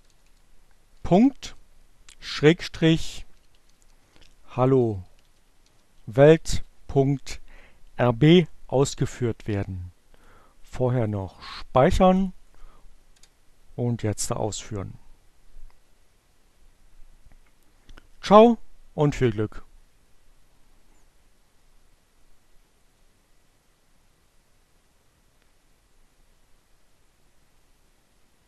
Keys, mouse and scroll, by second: 1.5-6.1 typing, 9.7 click, 10.5 click, 12.1 click, 12.5 Return.